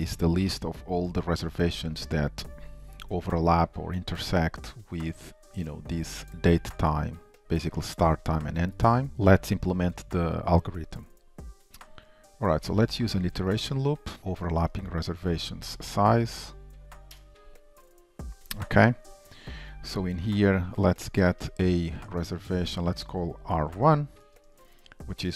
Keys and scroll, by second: 14.8 Return, 17.2 Return, 22.3 Return.